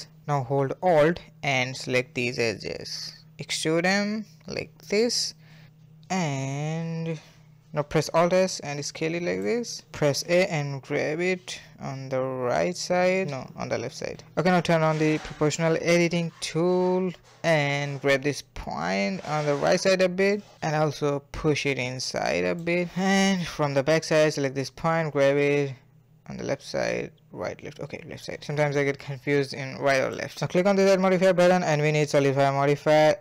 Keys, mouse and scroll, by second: 0.0-2.5 middle drag, 2.5 e, 3.6-7.7 middle drag, 8.1 alt+s, 9.1-11.1 middle drag, 11.1 a, 11.5 g, 11.8 middle click, 12.7 KP_1, 12.7-13.0 scroll up 3, 12.8 shift+middle click, 13.0 shift+middle click, 13.2 1, 13.5 click, 14.8 click, 15.7 g, 19.7-21.2 middle drag, 21.2 g, 22.2-24.2 middle drag, 24.2 click, 24.5 middle click, 24.6 g, 25.6 scroll down 3, 25.7-27.2 middle drag, 27.2 scroll up 3, 27.4 shift+middle click, 27.8 g, 29.1 a, 29.6 Tab, 29.7 scroll down 1, 30.0 middle click, 30.9-32.8 drag.